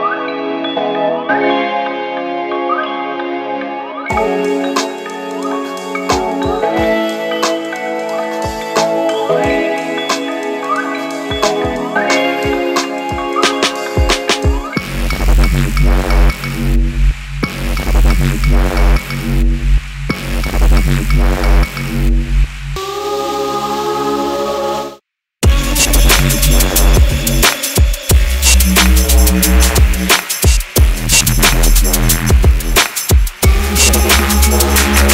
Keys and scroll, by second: 2.1 Delete, 12.3 Return, 34.2 Return.